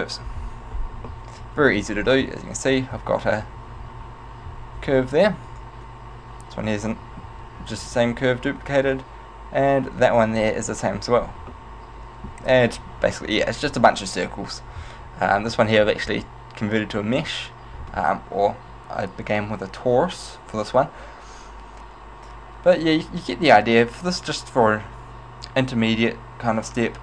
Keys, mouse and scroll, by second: 1.3 middle click, 2.3 Tab, 3.1 a, 3.5 a, 5.1 Tab, 6.1 right click, 7.5 Tab, 8.1 Tab, 9.6 right click, 10.0 Tab, 10.7 Tab, 11.7 middle click, 16.7 right click, 17.3 Tab.